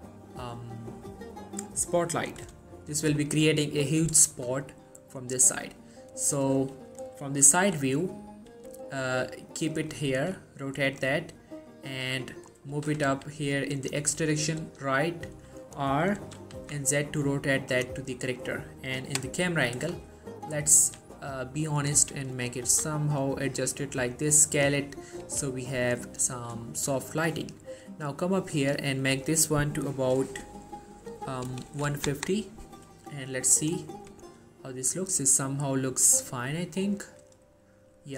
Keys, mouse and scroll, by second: 3.1-4.0 scroll up 1, 4.0 scroll down 1, 4.0 middle click, 4.5 shift+middle click, 5.5-6.1 middle drag, 7.6-8.6 typing, 9.9 click, 10.3 r, 11.0 click, 11.6-12.5 middle click, 12.6 scroll down 1, 12.9 g, 13.2 x, 13.9 click, 14.3 middle click, 14.7 r, 15.8 right click, 16.3 r, 16.7 z, 17.8 click, 18.1-18.7 middle drag, 20.9 r, 21.8 click, 22.1 g, 22.5 click, 22.8 s, 24.6 click, 25.4 r, 26.1 click, 26.4 shift+middle click, 27.1 scroll up 1, 27.2 shift+middle click, 28.3 click, 33.6 click, 38.0 scroll up 1.